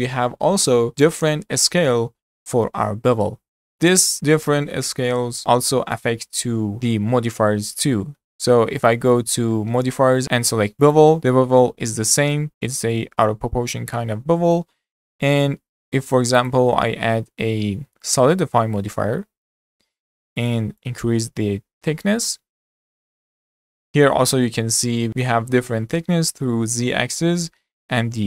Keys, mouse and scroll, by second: 3.7-5.7 shift+middle drag, 5.7 click, 8.8-10.7 drag, 11.2 middle drag, 11.4 scroll up 3, 11.9-12.5 shift+middle drag, 12.5-13.7 drag, 13.7 scroll down 2, 13.9-15.8 middle drag, 15.8-18.7 drag, 18.7-19.5 middle drag, 19.5 z, 20.8-23.6 drag, 23.6-24.0 scroll up 3, 24.0-25.1 shift+middle drag.